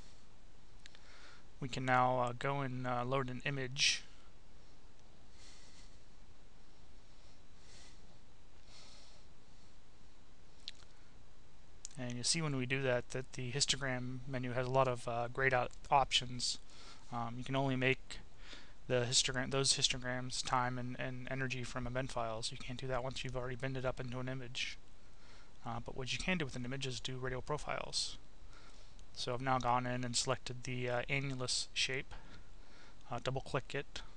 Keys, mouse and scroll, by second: 3.6 click, 5.0 click, 6.3 click, 7.5 click, 8.9 click, 10.6 click, 12.0 click, 14.9-16.2 drag, 17.6 middle click, 19.0 middle click, 23.4 click, 25.1 click, 26.9 click, 28.7-30.8 drag, 33.2-34.1 drag.